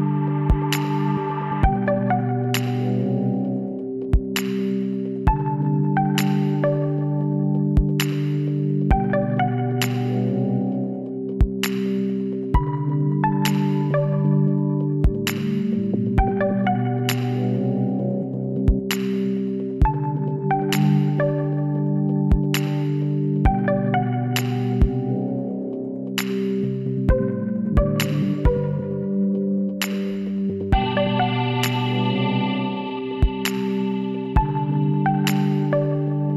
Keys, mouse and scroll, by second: 13.0 x, 16.6-21.0 middle drag, 21.0 Tab, 21.9 middle click, 22.2 middle click, 24.1-25.8 right drag, 25.0-27.1 drag, 25.8 middle click, 27.1 middle click, 28.6 Tab, 28.8 click, 29.8 middle click, 31.8-33.6 right drag, 32.8 x, 35.0 x.